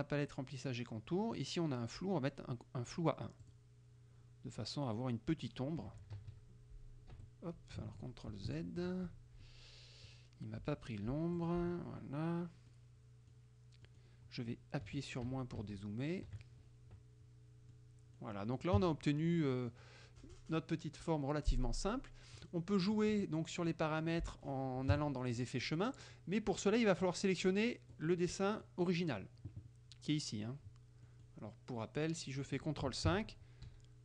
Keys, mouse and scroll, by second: 3.5 click, 5.9 KP_Subtract, 7.2 Escape, 8.4 ctrl+z, 11.5 click, 12.8 click, 13.9 click, 14.9 KP_Subtract, 17.8 click, 17.9 middle click, 18.8 KP_Subtract, 19.8 middle click, 22.5 click, 23.0 click, 24.3 middle click, 25.0 KP_Subtract, 25.7 middle click, 27.1-28.1 drag, 28.3 click, 28.5 middle click, 31.2 middle click, 33.2 ctrl+KP_5.